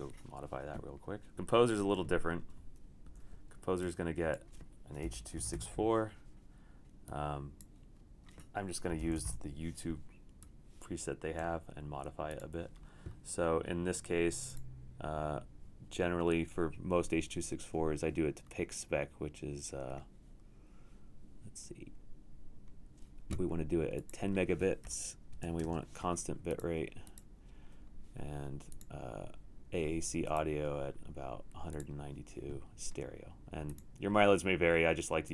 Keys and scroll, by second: 1.6 super+q, 3.3 super+w, 4.8-6.0 typing, 8.7-9.7 typing, 25.2-26.1 typing.